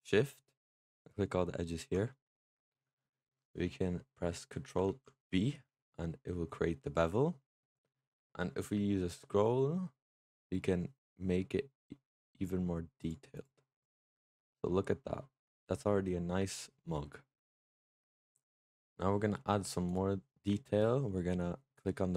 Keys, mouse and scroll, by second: 0.7 alt+shift+click, 2.0-4.7 middle drag, 4.7 ctrl+b, 13.2 click, 13.7 click, 14.0 Tab, 14.2 click, 14.5-17.5 middle drag, 17.9 scroll down 5, 18.2 Tab, 18.6 middle click, 18.8-19.7 scroll down 1, 19.7 click, 20.1 middle click, 20.5-21.0 scroll up 3, 21.0-22.1 middle drag.